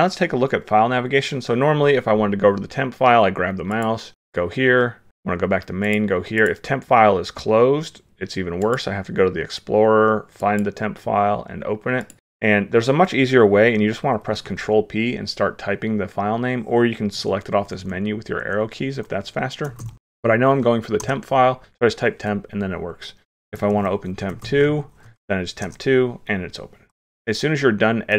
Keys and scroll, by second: 14.4 ctrl+p, 23.7 ctrl+p.